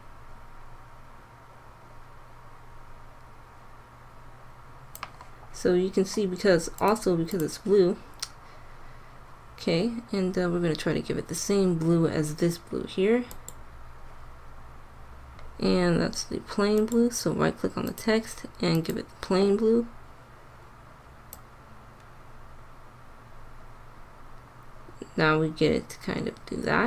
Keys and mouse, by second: 15.2-16.9 middle drag, 19.8 middle click, 21.5-23.1 drag.